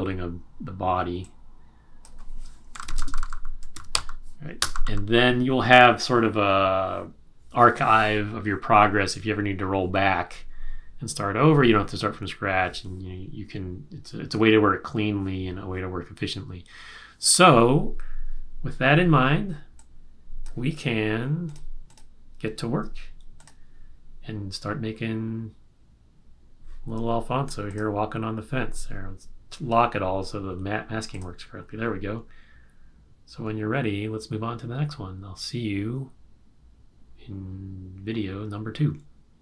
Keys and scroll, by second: 2.5-4.4 typing, 4.6 Return.